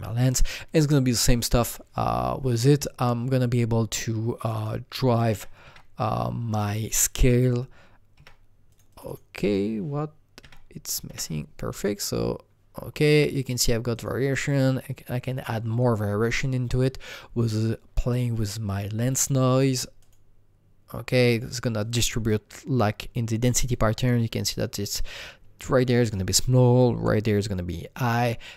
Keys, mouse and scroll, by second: 1.1 click, 3.2 click, 4.4 click, 4.4 alt+middle click, 4.5 double click, 5.0 KP_0, 5.3 KP_Decimal, 5.6 KP_5, 6.5 click, 6.6 double click, 7.2 KP_2, 8.1 KP_2, 8.7 click, 9.0 click, 9.0 KP_2, 9.4 click, 10.4 KP_2, 11.1 KP_Enter, 11.9 click, 13.9 click, 18.0 KP_Enter, 18.0 click, 18.0-21.5 drag, 21.5-24.1 drag.